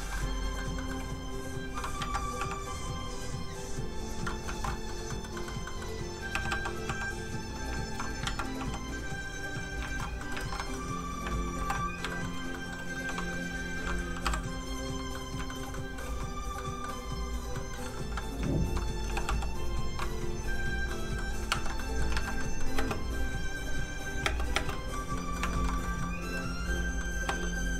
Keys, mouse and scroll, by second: 0.2 middle click, 1.3 click, 2.0 ctrl+z, 2.6 click, 4.3 middle click, 4.5 alt+shift+z, 4.8 middle click, 5.4 shift+middle click, 5.7 middle click, 6.3 g, 6.5 f, 6.7 click, 6.9 f, 7.0 click, 7.8 shift+click, 8.2 ctrl+shift+z, 8.7 click, 9.9 alt+shift+z, 10.2 middle click, 10.4 alt+shift+z, 11.2 middle click, 11.6 alt+m, 12.1 shift+middle click, 12.5 middle click, 12.6 middle click, 12.9 f, 13.1 click, 14.2 i, 14.6 click, 15.1 middle click, 15.4 shift+middle click, 16.2 click, 16.6 middle click, 17.2 click, 17.5 middle click, 18.5 shift+click, 19.1 shift+g, 19.3 f, 19.4 click, 20.9 middle click, 21.5 ctrl+Tab, 21.9 middle click, 22.1 alt+a, 22.5 middle click, 22.8 space, 24.7 middle click, 25.0 scroll down 1, 25.2 middle click, 25.5 shift+middle click, 25.7 middle click, 25.8 middle click, 27.3 space.